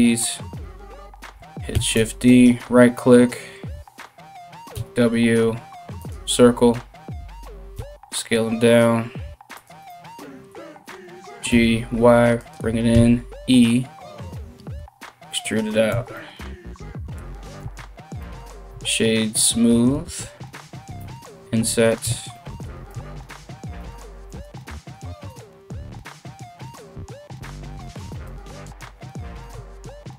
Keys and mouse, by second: 1.3 shift+d, 4.4 w, 7.4 s, 10.5 g, 12.5 e, 15.5 Tab, 17.2 w, 18.3 w, 19.5 Tab, 20.6 i, 21.6 Tab, 22.5 Tab, 23.4 ctrl+r, 24.9 ctrl+b, 29.3 ctrl+r.